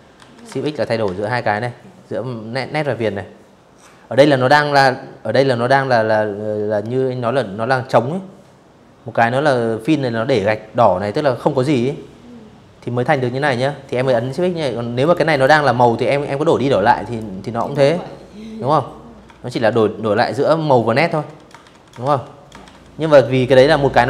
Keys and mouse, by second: 12.7 click, 13.0 click, 14.1 click, 15.2 click, 17.1 shift+x, 18.8 shift+x, 19.3 shift+x, 19.7 shift+x, 20.3 shift+x, 22.0 click, 23.2 click, 23.7 click.